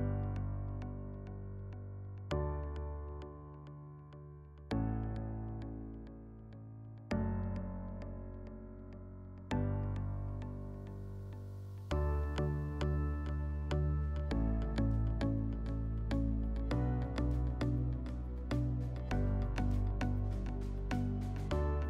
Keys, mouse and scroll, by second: 0.5 alt+w, 1.8 alt+middle click, 7.3 click, 8.9 click, 9.8 click, 12.4 click, 14.3 click.